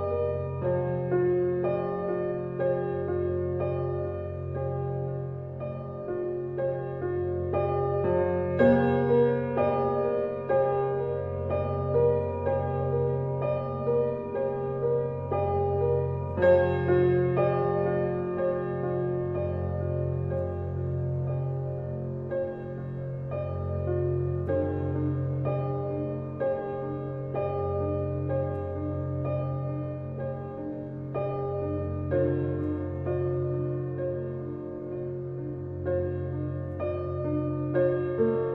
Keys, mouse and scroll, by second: 0.0 click, 0.7-1.1 scroll down 2, 1.1-1.9 middle drag, 1.9-2.3 scroll down 3, 2.3-11.3 shift+middle drag, 11.3 shift+a, 12.3 s, 14.4-14.9 scroll down 1, 14.9-15.2 middle drag, 15.2-15.6 scroll down 2, 15.9 middle drag, 16.1 Tab, 16.7 click, 17.6 e, 22.2-24.0 middle drag, 24.0-24.6 right drag, 24.7-31.4 drag, 32.7 Tab, 36.2 shift+a, 37.3 g.